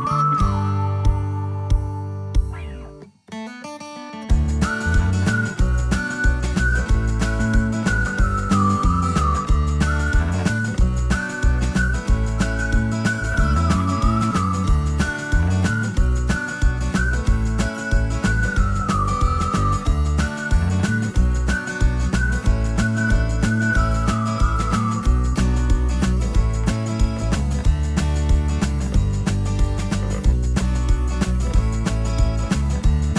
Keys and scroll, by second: 8.7 c, 13.7 c, 17.1 d, 18.3 ctrl+s, 22.1 ctrl+s.